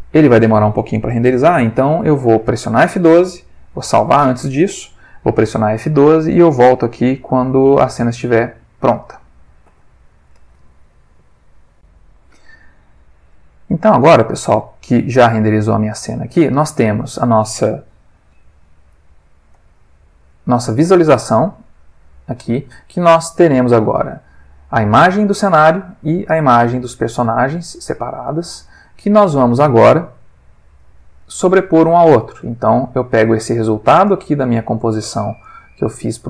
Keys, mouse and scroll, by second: 0.2 middle click, 3.7 ctrl+s, 9.6 F12, 11.7 click, 13.4 click, 15.1 click, 18.3-19.1 alt+middle drag, 19.5 click, 21.2 click, 21.9 click, 23.3 click, 23.9 ctrl+shift+click, 25.3-25.9 drag, 26.3 ctrl+shift+click, 27.2 ctrl+shift+click, 27.7 ctrl+shift+click, 28.3 ctrl+shift+click, 28.8 ctrl+shift+middle click, 29.8 ctrl+shift+click, 30.8-31.4 drag, 31.7 click, 32.5 ctrl+middle click, 32.9 ctrl+middle click, 34.1 click, 34.8 click, 35.4 click.